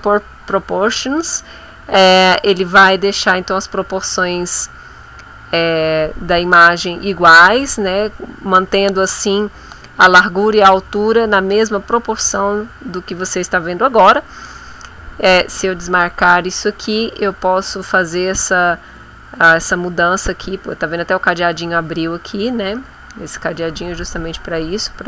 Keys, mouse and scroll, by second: 15.4 click, 22.9 click, 23.7 click, 24.2 click.